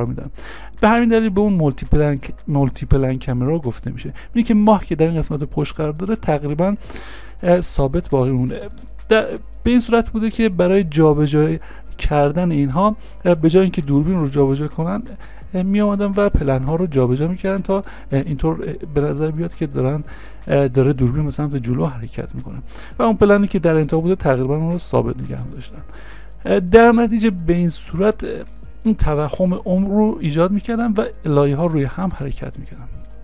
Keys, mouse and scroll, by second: 8.7 space, 13.4 space.